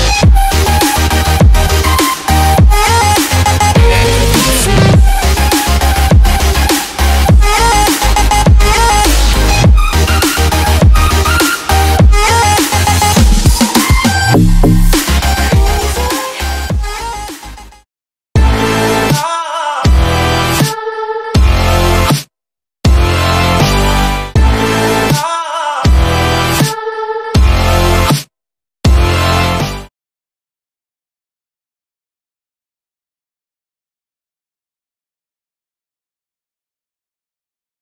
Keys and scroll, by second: 3.8-4.6 typing, 5.6-6.5 typing, 9.6 x, 11.5-12.5 typing, 13.6 0.